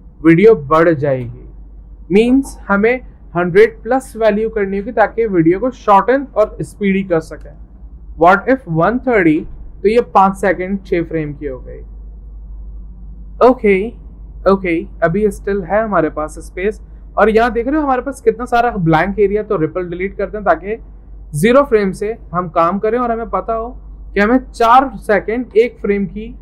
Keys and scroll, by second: 2.6 ctrl+a, 8.4-9.4 typing.